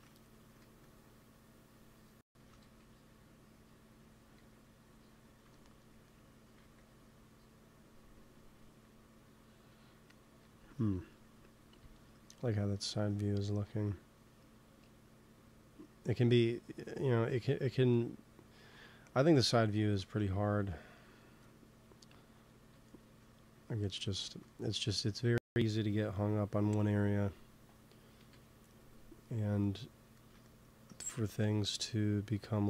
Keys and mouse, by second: 0.5 f, 0.5 click, 1.3-3.0 drag, 2.3 ctrl+z, 2.5 f, 3.3 click, 4.1 f, 5.4-6.5 drag, 6.5 ctrl+s, 10.7 KP_1, 12.9-15.8 middle drag, 19.9 ctrl+s, 22.8 middle click, 23.4-25.0 middle drag, 28.1 KP_3, 31.4 f, 32.0-32.6 drag.